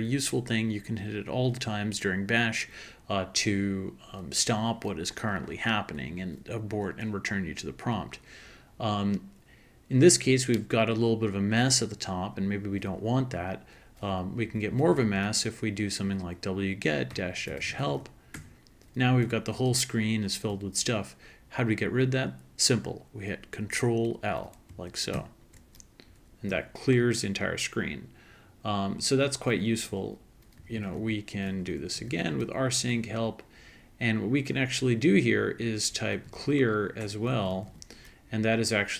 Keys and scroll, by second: 14.2-15.3 typing, 17.0-18.4 typing, 25.1 ctrl+l, 29.7-33.7 typing, 35.9-38.9 typing.